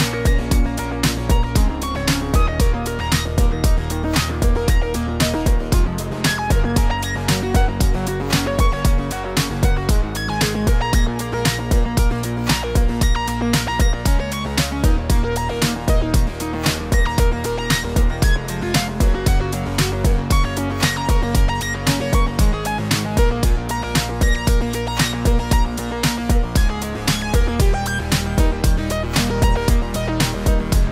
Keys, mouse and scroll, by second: 0.6-1.1 click, 1.0 click, 1.4 click, 1.4 m, 2.1 click, 3.2 click, 3.3 click, 3.4 click, 3.6 click, 3.8 shift+middle click, 4.0 click, 4.1 click, 4.2 click, 4.3 click, 4.6 click, 4.8 click, 5.0 click, 5.2 click, 5.4 click, 5.8 click, 5.8 shift+middle click, 6.0 scroll up 3, 6.2 shift+middle click, 6.3 scroll down 2, 6.6 scroll up 2, 6.8 shift+middle click, 7.0 click, 7.1 shift+click, 7.2 shift+click, 7.3 shift+click, 7.8 click, 7.9 middle click, 8.2 m, 9.0 click, 9.2 click, 9.3 shift+middle click, 10.1 click, 10.3 click, 10.3 shift+middle click, 10.5 click, 10.6 click, 10.7 shift+click, 10.8 shift+click, 10.9 click, 11.1 shift+click, 11.1 m, 11.8 click, 12.0 scroll down 2, 12.1 shift+middle click, 12.3 click, 12.3 scroll up 3, 12.5 shift+middle click, 12.8 click, 13.0 m, 13.5 shift+middle click, 13.8 click, 13.9 click, 14.3 click, 14.5 m, 15.3 click, 15.4-15.9 scroll down 3, 15.8 click, 16.0 click, 16.3 shift+middle click, 16.3 middle click, 16.5 ctrl+s, 16.6 middle click, 16.8 shift+middle click, 16.9 middle click, 18.7 click, 18.7 click, 19.1 Tab, 19.2 scroll up 2, 19.4 shift+middle click, 19.6 click, 20.0 click, 20.7 click, 20.8 click, 20.8-21.3 scroll down 7, 23.8 middle click, 24.3 Tab, 24.7 click, 25.9 scroll down 1, 26.1 click, 27.4 click, 27.5 shift+middle click, 27.8 click, 27.9 middle click, 28.0 scroll up 2, 28.2 middle click, 29.0 click, 29.2 click, 29.5 click.